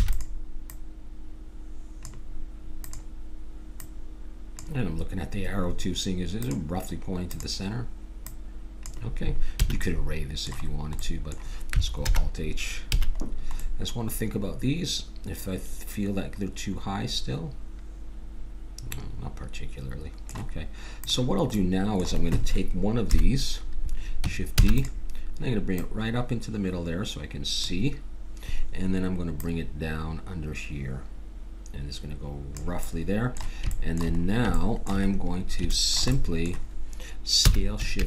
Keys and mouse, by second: 0.0 shift+d, 0.7-2.5 drag, 2.8-5.5 drag, 6.4-9.8 drag, 9.6 a, 9.8 middle click, 12.0 alt+h, 13.0 a, 21.0-22.8 drag, 23.0 KP_7, 24.5 shift+d, 25.7-27.6 drag, 29.4-31.2 drag, 32.8-35.2 middle drag, 37.3 s.